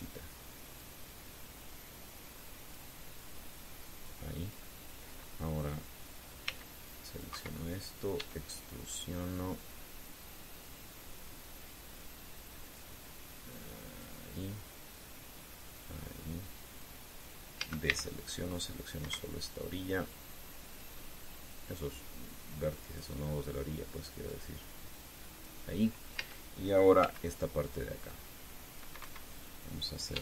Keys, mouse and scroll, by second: 0.0-1.8 drag, 2.4-3.6 drag, 4.3-5.4 drag, 7.2 c, 7.6 click, 8.0 Escape, 8.9 e, 12.3 click, 13.5-14.9 drag, 16.4-17.7 drag, 18.3 a, 18.6 c, 19.0 click, 19.8 Escape, 20.2-21.7 drag, 22.4-23.9 drag, 25.0-26.4 drag, 26.9 a, 27.7 c, 28.4-29.7 drag, 29.7 Escape.